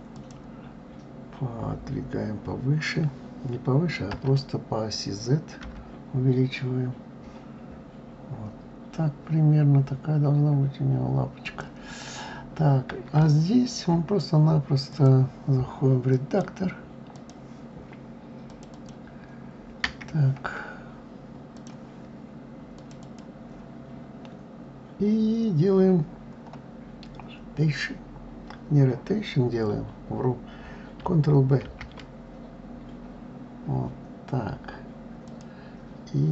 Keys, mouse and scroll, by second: 11.8-12.9 scroll up 1, 12.9 scroll up 2, 13.0-13.9 shift+middle drag, 13.9-14.6 scroll up 1, 14.6 click, 15.9-18.4 drag, 18.5 click, 21.3 click, 22.5 click, 22.8 click, 31.4 ctrl+b.